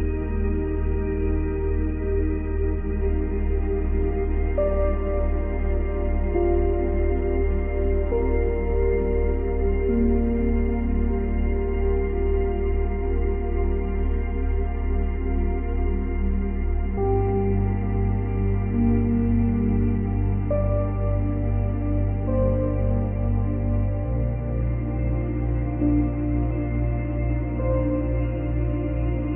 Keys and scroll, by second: 0.1 space, 0.7 space, 1.4 space, 5.0 space, 7.9 space, 14.9 Delete, 15.8 Delete, 16.7 Delete, 29.0 ctrl+z.